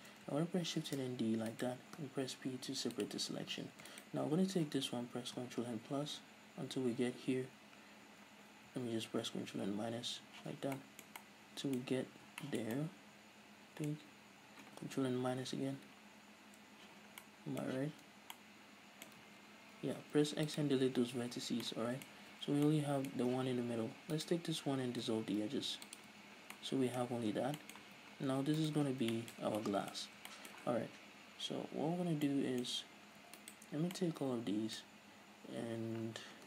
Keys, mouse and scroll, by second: 1.0 shift+d, 1.7 right click, 2.7 p, 4.1 alt+right click, 5.5 ctrl+KP_Add, 9.2 ctrl+KP_Subtract, 10.5 z, 10.9-18.0 middle drag, 11.9-12.5 scroll up 2, 15.5 ctrl+KP_Subtract, 16.9 z, 17.8 z, 18.1 a, 18.4-19.3 middle drag, 19.3 ctrl+z, 19.9 x, 21.6-24.2 middle drag, 21.6 scroll down 2, 22.2 z, 22.5 scroll down 2, 23.2 scroll up 2, 23.4 z, 24.2 alt+right click, 25.2 x, 26.2 a, 26.5 scroll down 1, 26.6-28.7 middle drag, 27.2 a, 27.4 scroll down 2, 27.9 z, 28.4 Tab, 28.7 right click, 29.0-33.5 shift+middle drag, 29.0 scroll down 2, 29.5 Tab, 30.1-30.4 scroll up 2, 32.1 scroll down 2, 32.8-33.5 scroll up 2, 33.5 alt+right click, 34.1-36.4 middle drag.